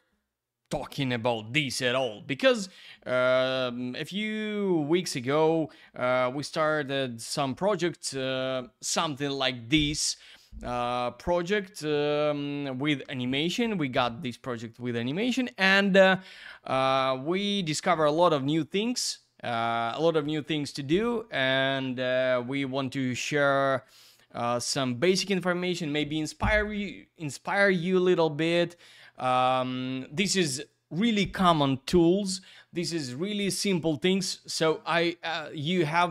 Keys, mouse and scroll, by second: 29.2 click, 29.4 click, 29.5 double click, 33.8 click, 35.5 click.